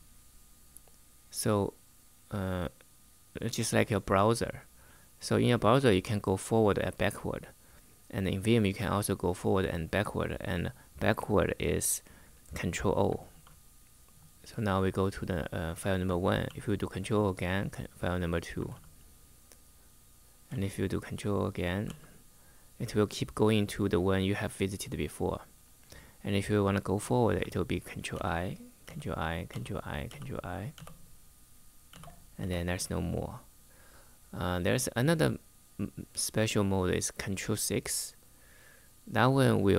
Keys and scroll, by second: 13.0 ctrl+o, 16.2 ctrl+o, 18.4 ctrl+o, 20.2 ctrl+o, 21.6 ctrl+o, 27.8 ctrl+i, 28.6 ctrl+i, 29.2 ctrl+i, 29.8 ctrl+i.